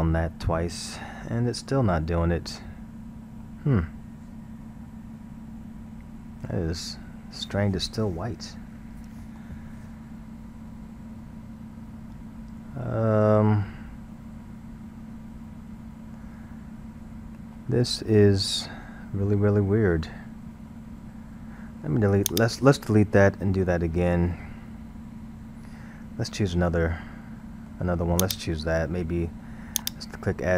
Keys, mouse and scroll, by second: 3.4-6.5 middle drag, 9.2 middle click, 9.8-12.2 scroll, 12.2-17.5 middle drag, 18.5-19.7 middle drag, 19.7-22.3 scroll, 22.3 click, 24.6 scroll, 26.5-28.2 shift+middle drag, 28.2 click, 29.8-30.5 drag.